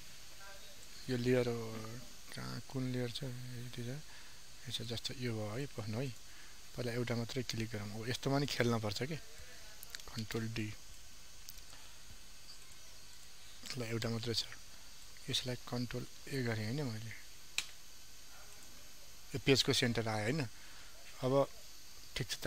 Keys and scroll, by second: 2.1 ctrl+alt+z, 10.2 ctrl+d, 16.1 ctrl+a.